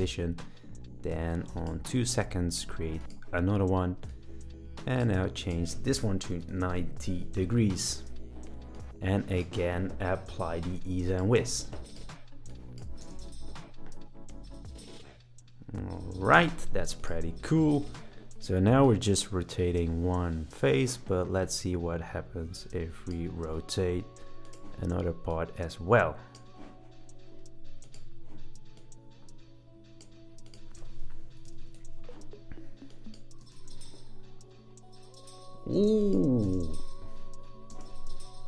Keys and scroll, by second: 6.1-6.9 typing, 13.0 space, 16.3 space, 30.7-32.0 typing, 33.4 space, 35.7 space, 36.4 space.